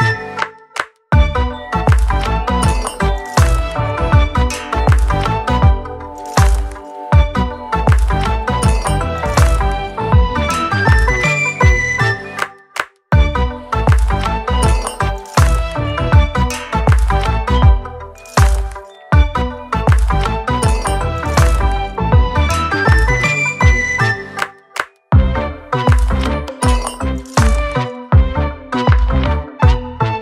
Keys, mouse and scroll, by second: 4.6 click, 5.1 ctrl+shift+t, 11.0 click, 11.7 ctrl+shift+t, 16.0 scroll down 5, 16.1 scroll up 3, 16.6 ctrl+s, 17.5 click, 17.8 click, 18.2 ctrl+shift+t, 25.1-26.1 scroll down 4, 26.3 click, 26.7 click, 27.5 click, 27.9 click, 28.3 click, 29.3 click, 29.6 scroll down 2, 29.8 click.